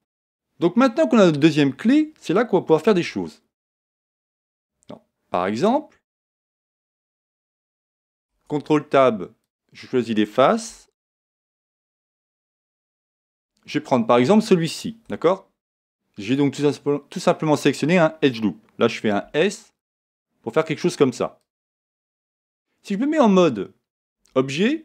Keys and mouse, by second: 2.9 Tab, 4.3-8.2 middle drag, 8.2 ctrl+Tab, 10.6 a, 14.7-16.6 right drag, 19.2 s, 21.5 click, 24.1 Tab.